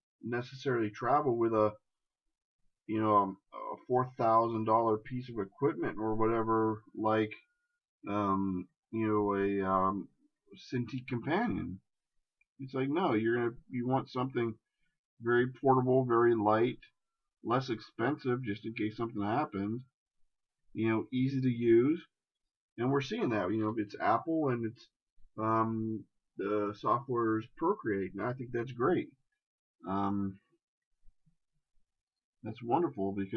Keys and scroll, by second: 7.0 shift+space, 10.2 shift+space.